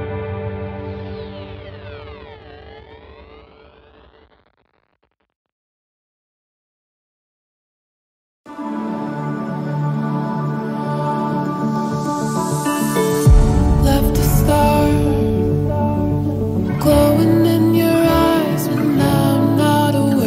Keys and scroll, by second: 6.6 typing, 12.2 ctrl+o.